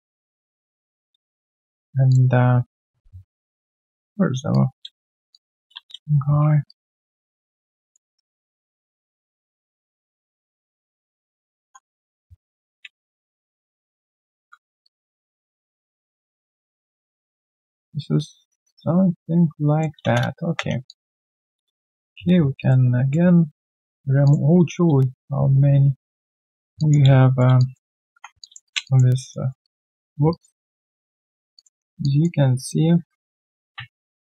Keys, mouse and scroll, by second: 3.0 ctrl+a, 5.3 alt+click, 5.7 space, 6.4 f, 6.7 alt+right click, 7.0 alt+middle click, 7.2 alt+right click, 7.7 alt+middle click, 8.1 right click, 9.5 right click, 10.2 double click, 11.2-12.7 typing, 20.4 r, 20.8 alt+click, 23.0 right click, 26.7 alt+click, 27.1 right click, 27.1 q, 27.5 alt+click, 27.8 alt+right click, 28.4 alt+click, 28.6 alt+right click, 28.8 alt+click, 29.2 alt+middle click, 29.4 alt+right click, 29.6 alt+click, 30.3 alt+right click, 31.7 q, 32.0 alt+click.